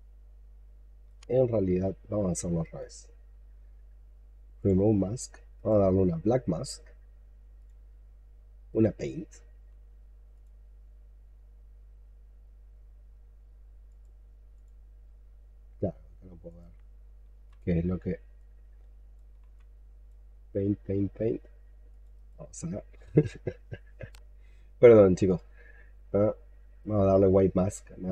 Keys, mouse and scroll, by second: 2.5 right click, 5.4 right click, 8.6 right click, 11.2 scroll up 2, 17.2 x, 19.3 x, 22.0 right click, 26.7 right click.